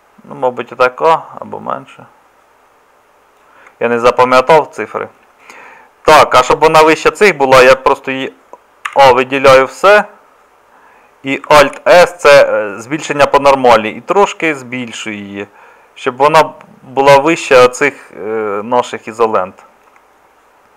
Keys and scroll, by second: 7.6 Tab, 8.9 a, 11.6 alt+s.